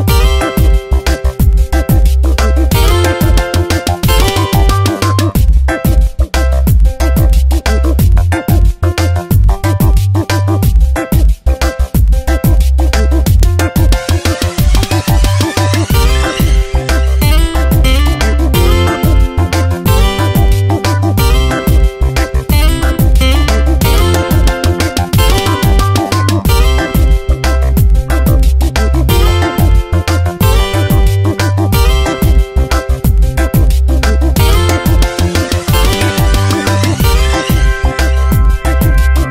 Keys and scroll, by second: 1.4 ctrl+z, 11.3 space, 13.3 space, 17.5 Down, 21.8 p, 26.8 space, 28.4 ctrl+z, 37.8 space.